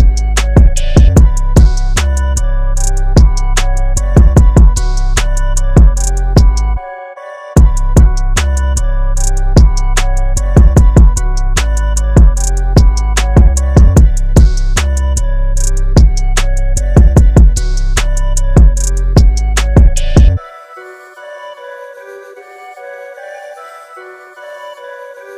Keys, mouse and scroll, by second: 0.3 alt+click, 7.3 click, 9.7 space, 9.9 click, 10.1 space, 11.0 scroll up 1, 11.6 scroll down 1, 11.9 space, 12.1 scroll up 1, 12.2 space, 13.2 alt+scroll up 1, 13.7 click, 21.1 click, 23.0 click, 25.1 KP_9.